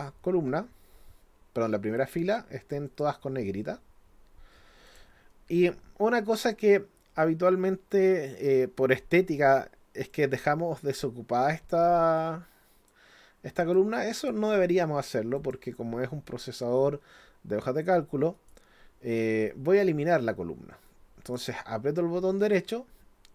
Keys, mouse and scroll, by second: 2.9 click, 4.9 click, 10.1-12.9 drag, 13.6 click, 14.2 click, 15.4 click, 18.3 right click, 20.9 right click.